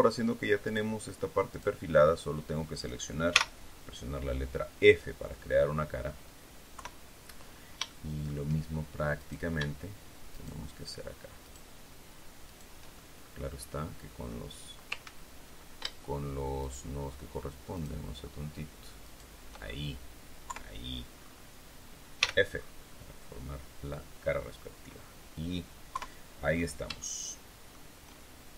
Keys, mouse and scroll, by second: 0.5 shift+right click, 1.4 shift+right click, 3.2 f, 3.9 scroll down 2, 4.3-6.1 drag, 6.6 KP_3, 7.6 shift+scroll up 2, 7.8 shift+middle click, 9.1 right click, 10.2 shift+right click, 11.3 shift+right click, 12.3 shift+right click, 12.8-14.4 shift+middle drag, 14.9 ctrl+z, 16.5 shift+right click, 17.6 shift+right click, 18.9 shift+right click, 19.5 shift+scroll down 2, 20.4 KP_3, 21.0-21.4 scroll up 2, 22.1 f, 22.4-22.7 scroll down 2, 22.8-24.7 drag, 25.8 KP_3, 26.4-26.8 scroll up 2, 26.9 shift+middle click.